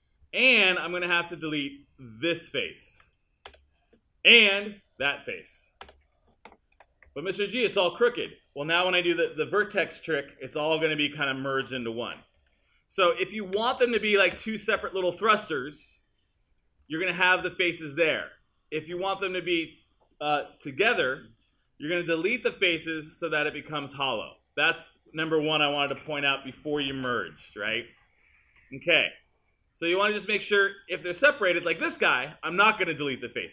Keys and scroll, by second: 3.5 BackSpace, 5.9 BackSpace, 13.6 super+z, 22.4 Delete, 26.0 BackSpace.